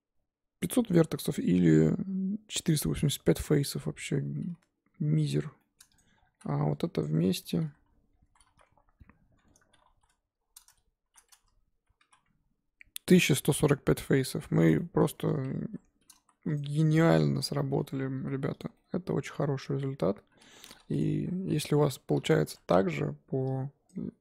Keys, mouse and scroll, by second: 0.9 Tab, 1.2 Tab, 3.7 Tab, 4.2 Tab, 5.2 alt+h, 5.5-5.9 scroll up 1, 5.9 click, 6.2 scroll down 1, 6.3 z, 7.0 click, 7.4 Tab, 7.6 a, 8.4 3, 9.3 Tab, 11.0 shift+h, 11.3 Tab, 14.6 click, 14.8 middle click, 15.6 ctrl+z, 16.1 ctrl+z, 16.5 click, 17.0 ctrl+z, 17.2 ctrl+z, 17.6 ctrl+z, 18.2 z, 18.6 click, 18.7 scroll down 1, 18.7-20.5 middle drag, 20.5-21.0 scroll up 1, 21.0 click, 21.1 KP_3, 21.6 scroll up 1, 22.0 Tab, 22.1 z, 22.4 1, 22.5-23.9 scroll up 2, 23.9 click.